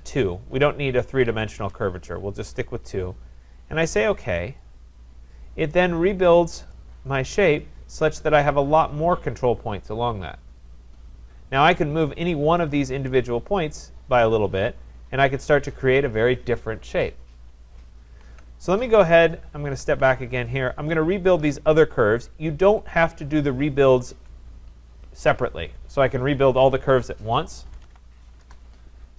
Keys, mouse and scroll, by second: 4.6 click, 6.7 click, 7.6 click, 13.2 click, 14.6 click, 18.3 ctrl+z, 19.6 ctrl+z, 20.5 click, 21.5 click, 22.9 shift+click, 24.0 click, 27.6-28.3 typing, 28.4 Return.